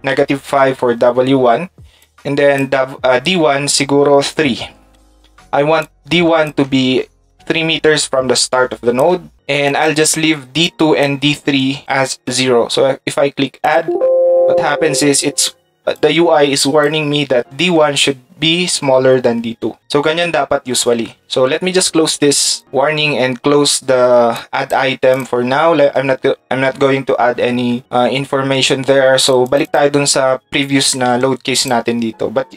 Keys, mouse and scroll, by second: 31.6 ctrl+click.